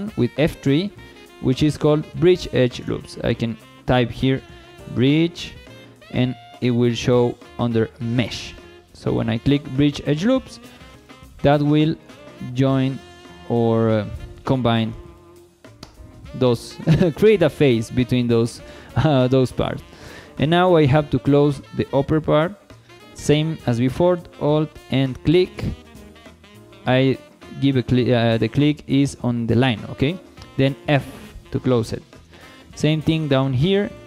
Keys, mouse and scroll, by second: 0.4 F3, 11.0 shift+middle click, 11.5-11.8 scroll up 2, 11.8 shift+middle click, 12.2 middle click, 13.6 middle click, 14.7 scroll down 2, 15.0 shift+middle click, 16.7 scroll down 1, 17.0 shift+middle click, 18.5 Tab, 18.9 shift+middle drag, 19.3-20.1 middle drag, 20.4-20.7 shift+middle drag, 20.9 scroll up 1, 21.2 shift+middle click, 21.9 Tab, 24.8 alt+click, 30.8 f, 31.9 shift+middle click, 32.3 middle click, 33.1 shift+middle click, 33.9 alt+click.